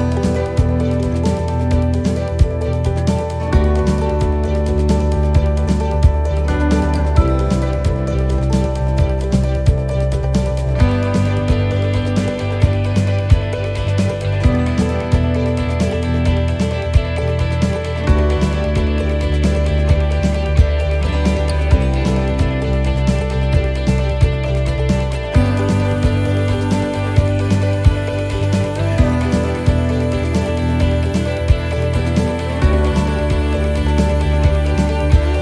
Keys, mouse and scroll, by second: 2.4 shift+middle click, 3.2 middle click, 4.3 right click, 5.6 shift+right click, 6.2 right click, 7.3 shift+right click, 8.8 shift+right click, 8.8 shift+middle click, 9.3 middle click, 9.9 shift+right click, 10.3 middle click, 11.3 click, 14.0 middle click, 18.3 click, 18.3 middle click, 20.7 ctrl+r, 26.1 ctrl+r, 26.1 right click, 27.4 right click, 29.2 right click, 29.5 shift+right click, 30.6 shift+right click, 34.2 shift+right click, 34.2 middle click.